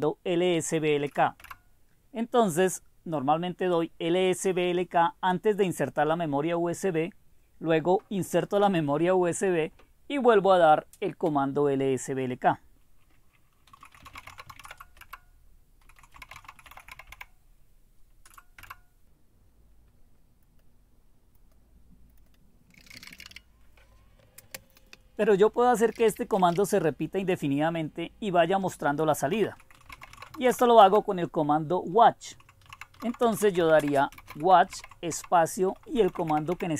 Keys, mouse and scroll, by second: 0.0-0.3 typing, 1.4 Return, 13.8-17.6 typing, 18.6 Return, 20.6 click, 22.3 click, 22.6-23.7 typing, 25.9 Up, 26.2 Up, 26.5 Return, 29.3-31.0 typing, 32.5-36.7 typing.